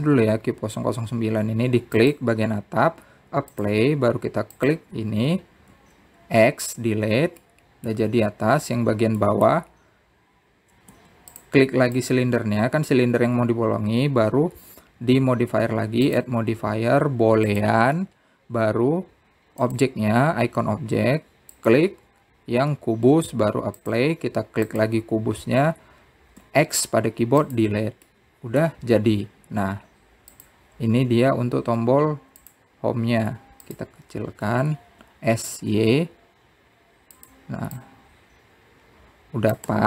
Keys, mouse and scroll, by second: 5.2-6.4 drag, 7.4 x, 9.1-12.6 middle drag, 13.7 click, 19.4-20.8 drag, 21.4 click, 25.5-26.5 drag, 28.1 x, 29.9-31.4 middle drag, 31.4 z, 35.4 click, 36.2 s, 39.5 click.